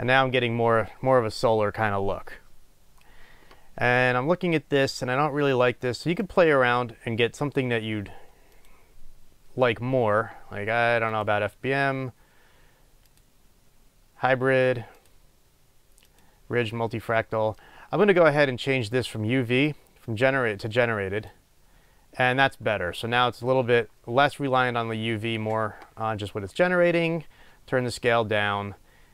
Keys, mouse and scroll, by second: 0.5-1.2 scroll down 1, 1.2 scroll up 1, 2.4-2.8 scroll down 1, 2.8-3.2 scroll up 1, 8.8-29.1 drag.